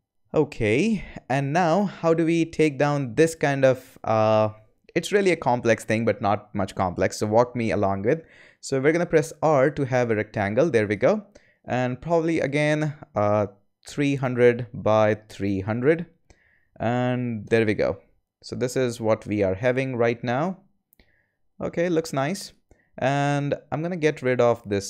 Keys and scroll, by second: 9.2 r, 13.8 3, 14.0 0, 14.6 Tab, 15.0 3, 15.3 0, 17.4 Return.